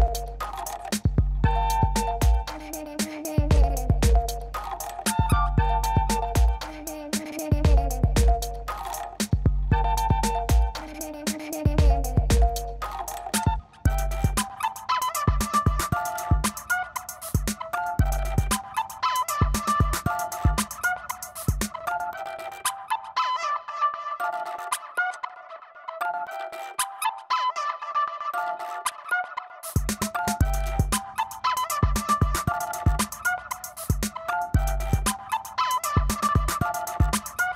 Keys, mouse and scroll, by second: 0.8 click, 2.6 click, 3.6 click, 4.9 click, 7.0 click, 9.4 alt+s, 14.3 click, 17.2 alt+s, 25.2 click, 25.9 scroll, 26.0 middle click, 26.4 middle click, 26.5 middle click, 26.8-28.7 scroll, 32.8 ctrl+shift+b.